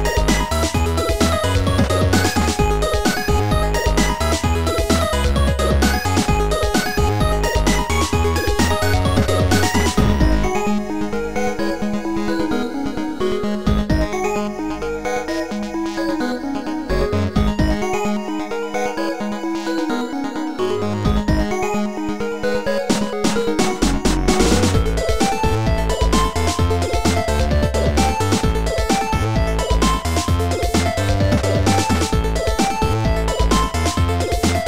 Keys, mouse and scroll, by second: 1.3 click, 3.2 click, 4.8 click, 7.1 click, 9.1 click, 13.2 click, 15.4 click, 18.5 click, 19.6 click, 20.1 click, 21.4 click, 23.4 click, 25.7 right click, 27.7 click, 29.4 right click, 29.4 click, 31.6 click, 32.8 click.